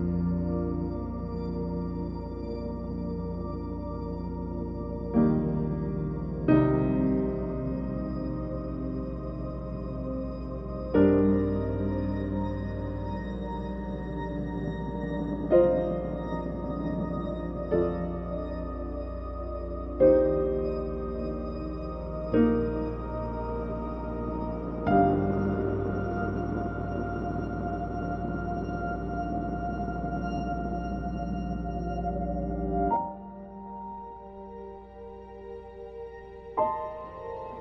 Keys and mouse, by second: 0.0-4.9 typing, 0.4 click, 0.8 click, 1.1 shift+click, 1.5 click, 1.5 right click, 1.7 Tab, 2.3 Tab, 2.3 shift+click, 2.4 alt+a, 2.5 click, 2.6 right click, 2.8 F23, 2.9 click, 3.3 shift+click, 3.4 click, 3.5 drag, 4.0 click, 4.1 shift+middle click, 4.3 shift+middle click, 4.5 F23, 4.6 shift+middle click, 5.1 shift+middle click, 5.4 click, 7.0 click, 7.1 alt+h, 7.3 F23, 7.3 click, 7.4-10.4 typing, 8.0 click, 8.3 F23, 8.4 shift+click, 8.6 Tab, 8.6 click, 9.6 click, 10.4 Tab, 10.7 shift+click, 11.0 click, 11.3 Tab, 11.4 g, 11.6 e, 11.7 shift+middle click, 11.7 g, 12.0 shift+click, 15.2 shift+middle drag, 15.6 middle click, 17.8 KP_1, 18.1 click, 20.4 Tab, 20.7 click, 20.9 drag, 21.9 KP_Decimal, 22.0 KP_0, 22.6 shift+middle click, 23.3-23.7 drag, 23.7 shift+middle click, 23.9 g, 24.5 click, 24.8 g, 25.9 g, 26.2 r, 26.8 g, 27.1 r, 28.4 g, 28.8 g, 29.0 g, 29.6 ctrl+alt+a, 35.7 middle click.